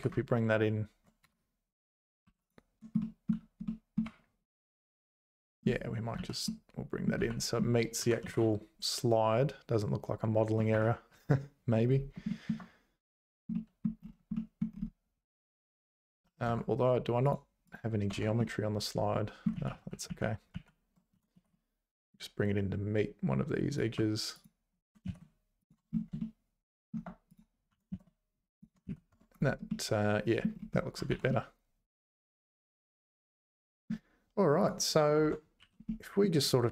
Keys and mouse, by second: 2.3 2, 3.0 middle click, 3.6 middle click, 4.0 `, 6.2 z, 6.4 middle click, 7.2 z, 8.0 g, 11.3 `, 12.3 shift+middle click, 13.5 middle click, 14.3 middle click, 16.1 z, 16.5 Tab, 17.7 click, 18.1 Tab, 18.4-19.4 middle drag, 19.5 ctrl+z, 19.8 ctrl+z, 20.1 ctrl+z, 20.5 ctrl+z, 21.1 g, 24.4 click, 24.8 g, 26.4 shift+middle click, 27.3 click, 27.7 g, 28.9 z, 29.1 Tab, 29.7 middle click, 31.1 ctrl+s, 31.3-33.9 middle drag, 34.6 click, 35.2 Tab, 35.6 2, 35.8 middle click, 36.5 click.